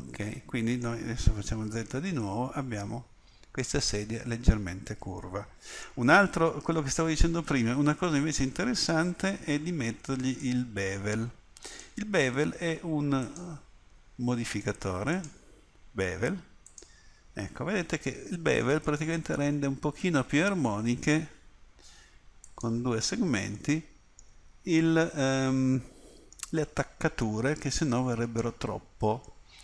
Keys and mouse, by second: 1.6 z, 6.3 Tab, 10.4-15.4 middle drag, 22.4-23.6 drag, 23.6 middle click, 27.5-29.6 middle drag.